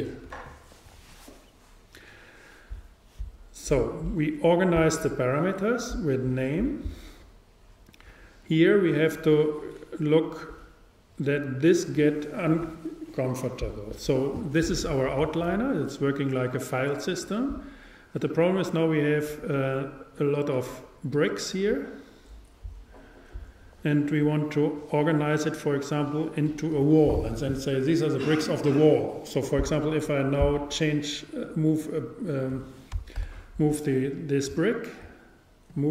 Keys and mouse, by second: 31.5-33.3 drag, 33.3 super+z, 34.5-35.9 super+drag, 34.7-35.9 right drag.